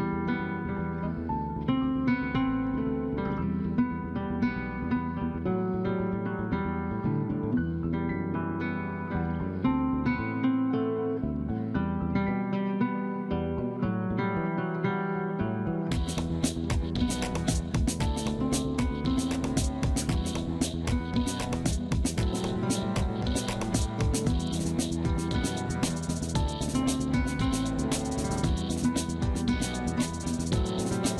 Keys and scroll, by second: 0.1 ctrl+r, 2.5 ctrl+r, 3.1 F2, 5.6 ctrl+g, 9.6 F2, 15.4 F3, 15.9 F2, 29.4 F3.